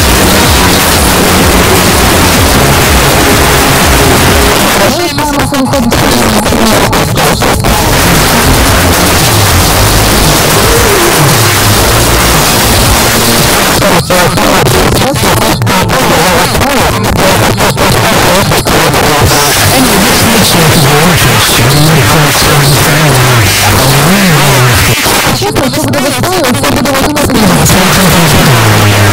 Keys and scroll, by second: 4.5 Page_Down, 13.5 Page_Down, 25.0 Page_Down.